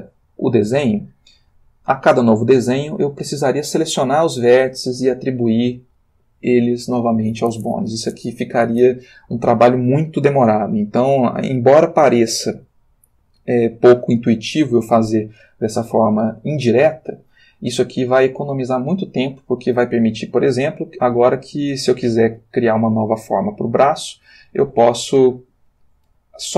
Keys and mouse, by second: 0.4 click, 16.8 click.